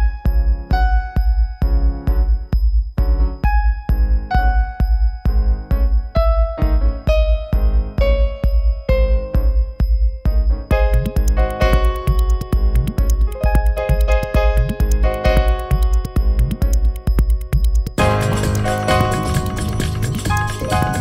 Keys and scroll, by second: 9.3 space.